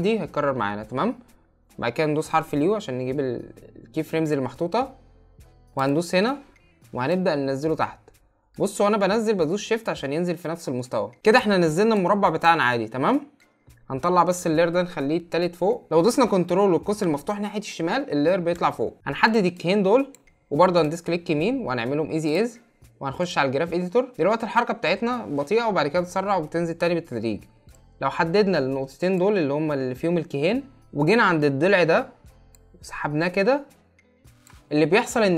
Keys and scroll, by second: 15.9 ctrl+].